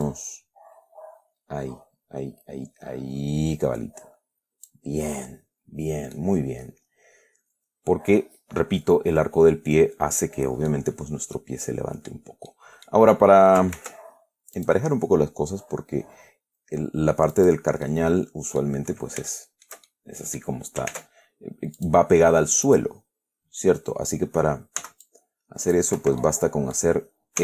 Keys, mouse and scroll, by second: 0.3 click, 1.0-1.4 scroll up 2, 6.4-11.2 middle drag, 11.7 middle click, 12.8 middle click, 14.0 ctrl+r, 14.9 click, 17.6 click, 18.1 middle click, 19.6 shift+middle click, 20.5 middle click, 21.2 ctrl+Tab, 22.1 click, 22.9 right click, 25.1 c, 25.3 click, 26.2 middle click, 26.3 Escape, 26.7 scroll down 1, 27.0 middle click.